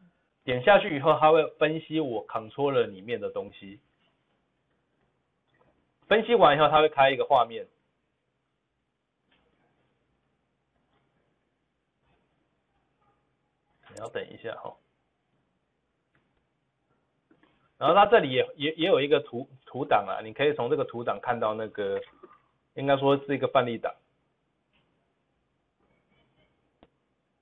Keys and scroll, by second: 24.1 typing.